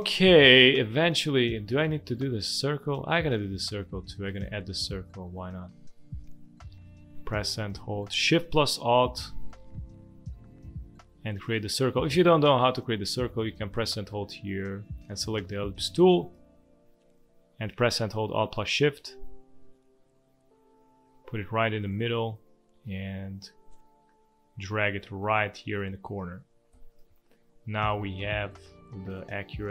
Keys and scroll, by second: 2.4 space, 3.9 space, 4.7 space, 12.4 ctrl+z, 26.7 v, 27.5 space, 28.8 space.